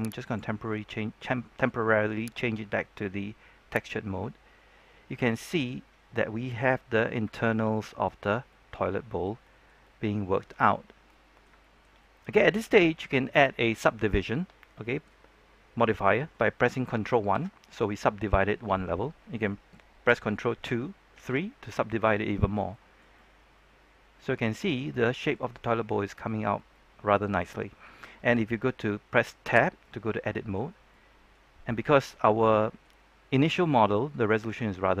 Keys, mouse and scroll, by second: 0.2-4.0 drag, 4.4-5.2 scroll down 1, 5.2 middle click, 5.9-6.3 scroll up 1, 6.3-6.8 scroll down 1, 7.3 shift+middle click, 8.2 scroll up 1, 8.4-10.8 middle drag, 10.8 scroll up 1, 11.0 middle click, 11.5-13.1 shift+middle drag, 17.3 ctrl+1, 20.5 ctrl+2, 21.1 ctrl+3, 21.6-26.6 middle drag, 29.7 Tab, 29.7 middle click, 31.3 scroll up 1, 31.6 middle click, 33.3 scroll down 1, 33.5 middle click, 34.2 scroll up 1, 34.5 middle click.